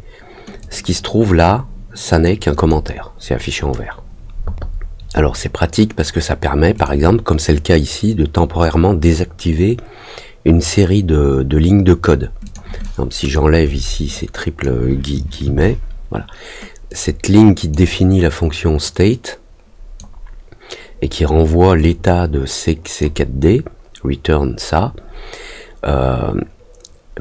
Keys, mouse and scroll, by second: 0.5-2.2 drag, 2.5 click, 6.7 click, 12.4 click, 12.8 click, 14.1 click, 16.8 click, 18.8-19.9 drag, 21.8-22.9 drag.